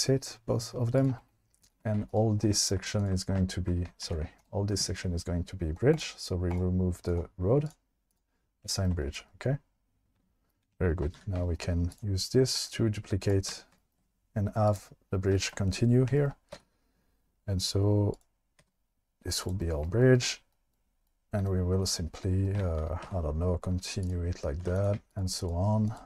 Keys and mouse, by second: 1.0 click, 2.0 2, 2.1 click, 4.1 ctrl+z, 6.5 click, 7.2 click, 8.1 click, 11.1 2, 12.6 shift+d, 13.5 1, 16.6 e, 18.1 click, 18.6 e, 19.4 click, 23.1 e, 24.0 click, 24.6 2, 24.8 click.